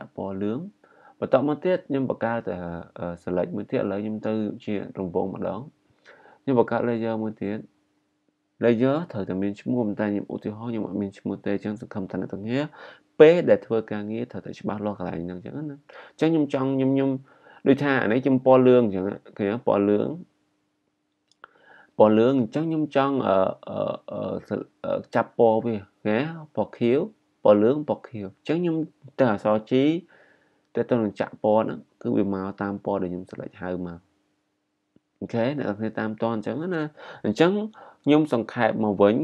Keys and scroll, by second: 2.1 g, 16.6 i, 29.4 g.